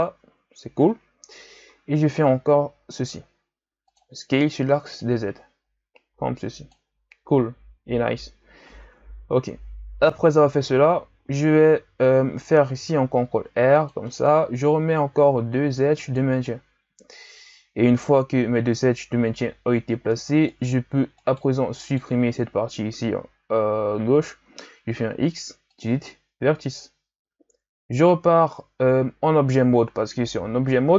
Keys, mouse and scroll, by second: 0.3 z, 1.7 s, 5.0-8.2 drag, 8.8 Tab, 9.3 Tab, 12.7 ctrl+r, 15.0 ctrl+r, 20.5 right click, 21.2 shift+right click, 21.8 shift+right click, 24.6 x, 28.1 Tab.